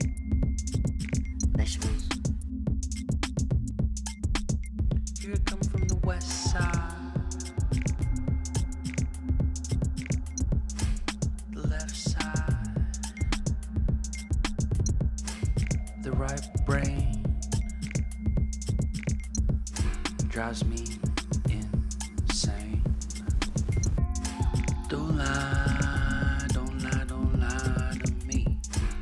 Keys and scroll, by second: 4.4 ctrl+t, 5.7 Return, 8.6-12.3 typing, 12.5 Return, 15.1 Down, 15.4 Down, 17.5-18.7 typing, 23.1 ctrl+z.